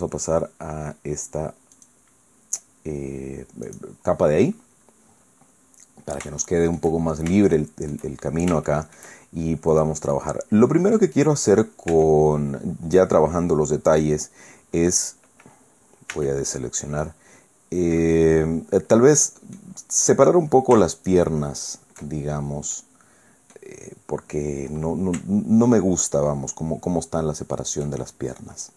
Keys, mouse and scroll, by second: 1.7 click, 3.7 click, 5.0-5.3 scroll down 1, 5.7-6.1 scroll up 1, 6.4 shift+click, 7.5 shift+click, 8.7 shift+right click, 9.7 right click, 10.1-11.1 right drag, 11.5 middle click, 11.9 Tab, 14.9 click, 16.1 a, 17.0-19.7 drag, 20.9 alt+shift+right click, 22.1-22.5 alt+shift+scroll down 1, 22.7-23.7 drag, 23.7-24.2 scroll up 1, 24.2-28.0 middle drag.